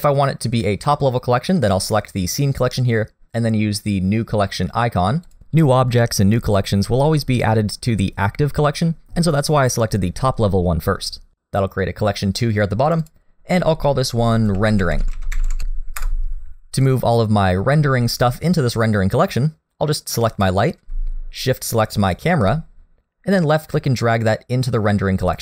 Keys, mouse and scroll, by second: 2.2 click, 5.2 click, 12.9 click, 13.0 click, 20.3 click, 22.0 shift+click, 23.5 click.